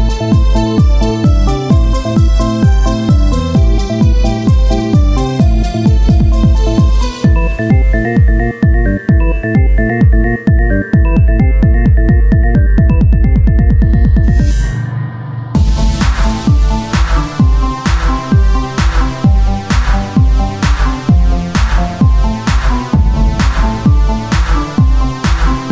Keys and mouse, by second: 0.5 ctrl+Tab, 1.4 click, 2.7-4.3 drag, 5.6 e, 8.9 ctrl+Tab, 10.3 click, 10.3 p, 10.9 Tab, 11.3 click, 11.5 Tab, 12.3 ctrl+Tab, 13.1 KP_3, 14.4 click, 14.7 z, 15.1 c, 15.8-17.3 drag, 17.7 r, 19.2 z, 19.8 z, 20.2-21.7 drag, 21.7 Tab, 22.4 KP_3, 22.9 Tab, 23.8-25.4 drag, 25.4 z, 25.4 c, 25.6-25.7 drag.